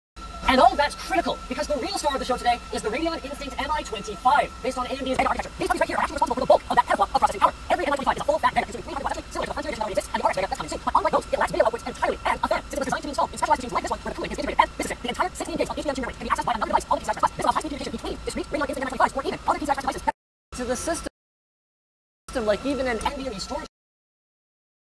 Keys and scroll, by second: 0.3 f, 0.6 f, 5.2 d, 6.1 f, 7.1 g, 8.8 a, 10.7 s, 12.0 s, 14.3-18.7 typing, 20.2 space, 21.1 space, 22.4 space, 23.0 d, 23.7 space.